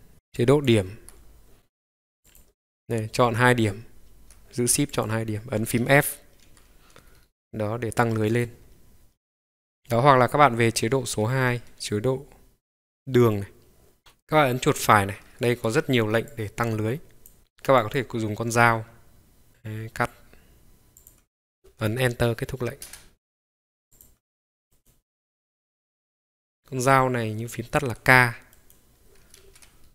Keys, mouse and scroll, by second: 0.1 ctrl+1, 0.1 middle click, 2.2 click, 4.9 shift+click, 6.4 f, 7.0 scroll up 1, 7.1 scroll down 1, 7.2-7.7 scroll up 2, 8.3 click, 9.3 click, 11.6 ctrl+click, 13.3 click, 14.0-23.0 right drag, 23.9 click, 24.7-27.9 right drag, 28.5 right click, 29.0 ctrl+right click.